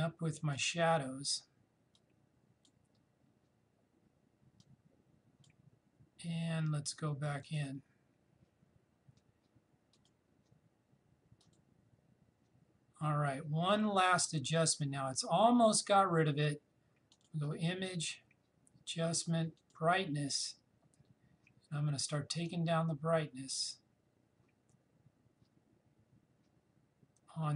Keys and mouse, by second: 8.6 click, 9.9 click, 17.1 click, 19.6 click, 22.5-27.5 drag.